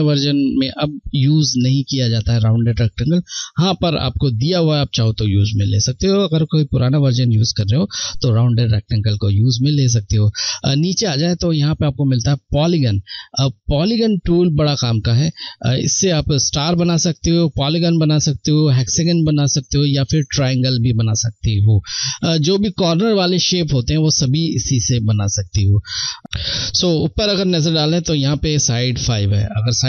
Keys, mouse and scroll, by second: 12.2 click, 12.3 click, 29.8 F1.